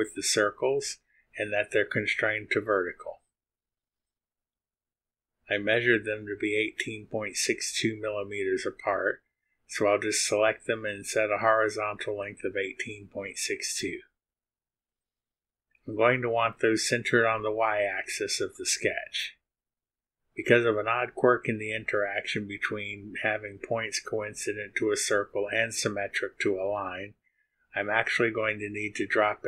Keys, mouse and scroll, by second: 0.4 click, 2.5 click, 4.7 click, 7.2 click, 8.0 click, 10.1 click, 11.2-13.3 typing, 14.2 Return, 26.1-27.5 drag, 28.3 click.